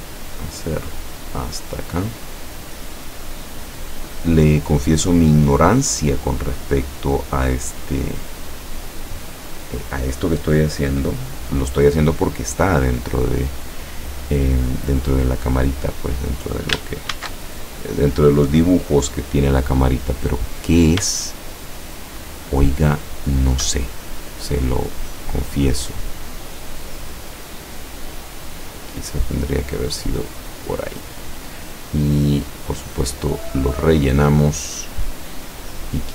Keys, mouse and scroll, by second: 0.9 click, 5.0 click, 7.7 click, 9.4 click, 12.7 click, 13.3 click, 15.7 click, 17.2 ctrl+shift+a, 21.3-23.6 shift+drag, 27.3-30.6 drag, 32.7 click, 33.5 click, 35.6 click.